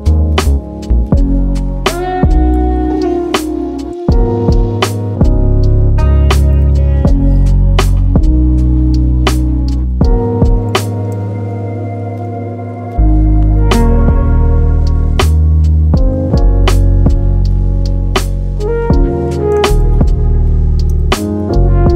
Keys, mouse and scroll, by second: 0.7 click, 0.7 middle click, 1.7 Tab, 2.7 ctrl+2, 3.8 Tab, 4.4 a, 6.6-7.6 drag, 7.6 Tab, 10.4 shift+click, 11.2 ctrl+l, 12.9 click, 13.4-14.9 middle drag, 14.9-15.9 right drag, 15.9 scroll down 2, 16.1-17.7 middle drag, 17.7 Tab, 18.2 click, 18.8 middle click, 19.6 shift+d, 20.9 p, 21.6-21.9 scroll up 2.